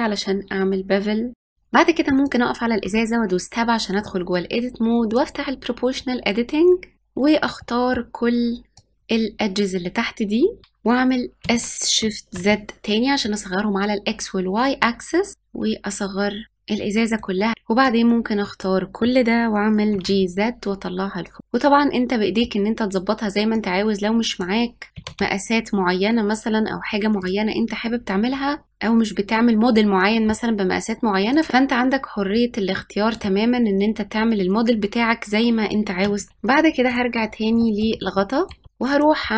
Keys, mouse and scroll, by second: 1.5 Tab, 3.7-6.7 drag, 6.9 middle click, 7.3 click, 10.6 s, 16.4 click, 16.7 middle click, 17.5 click, 18.5 g, 21.0 click, 21.4 middle click, 22.1 click, 23.9 g, 27.5-29.0 middle drag, 29.9-31.4 drag, 31.7 click, 35.1 Tab, 36.3-38.6 shift+middle drag, 38.6-39.3 drag.